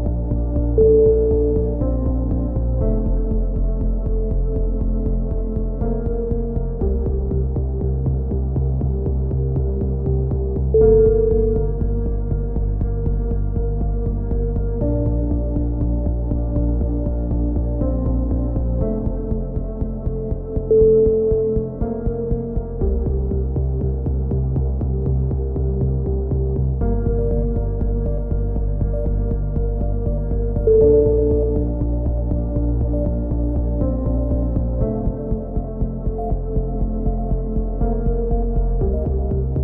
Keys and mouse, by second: 0.2-1.8 middle drag, 2.6 ctrl+r, 4.7 a, 5.0-6.5 right drag, 6.8-7.8 drag, 8.3-9.4 right drag, 9.4 middle click, 9.6 click, 12.3 click, 14.9 click, 16.3 z, 17.1 z, 17.7 click, 18.5 middle click, 19.0 right click, 20.6 click, 20.8 a, 21.3 right click, 22.0 right click, 22.5 click, 22.6 right click, 22.8 click, 23.6 a, 29.1-30.7 middle drag, 30.9-31.9 right drag, 31.5 click, 32.1-33.2 right drag, 32.7 click, 33.9-35.3 right drag, 34.4 click, 35.8 a, 35.9-37.1 middle drag, 37.1 z, 37.2 middle click, 37.6 Tab, 38.2 Tab, 38.4 Tab, 38.8 z.